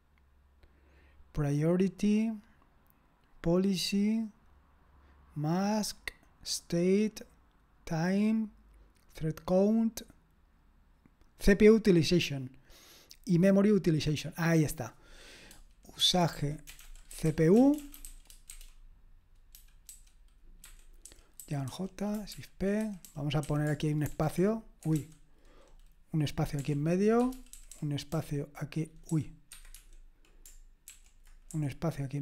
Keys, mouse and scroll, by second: 5.3-8.6 scroll up 1, 8.6-15.5 scroll up 1, 15.5-16.0 scroll up 1, 15.8-25.5 typing, 20.6 Escape, 26.6-32.0 typing, 29.5 Escape.